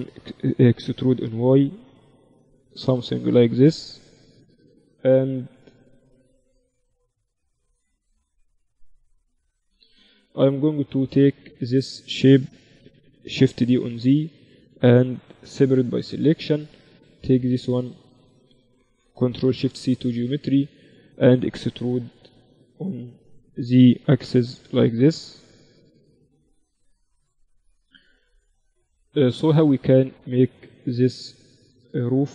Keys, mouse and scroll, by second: 0.7 e, 3.5 z, 4.2 z, 5.2 KP_1, 6.2 z, 8.1 z, 9.4 z, 10.7 z, 11.4-13.1 middle drag, 13.4 shift+d, 15.5 p, 16.3 Tab, 17.3 Tab, 17.6 a, 17.8 a, 18.1 a, 18.4 Tab, 19.2 ctrl+alt+shift+c, 20.4 Tab, 22.0 KP_1, 22.7 z, 24.0 e, 27.2 Tab.